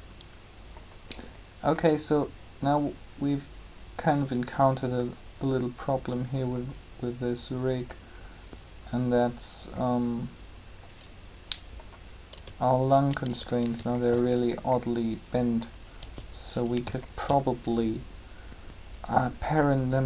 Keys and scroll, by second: 12.3 Tab, 16.0 Tab.